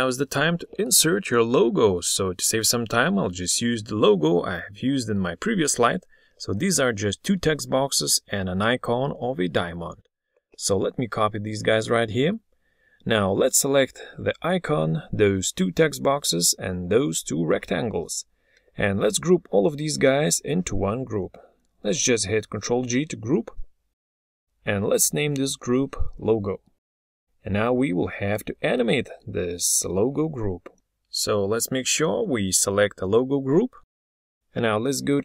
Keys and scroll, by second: 7.0 ctrl+c, 8.5 ctrl+v, 22.6 ctrl+g.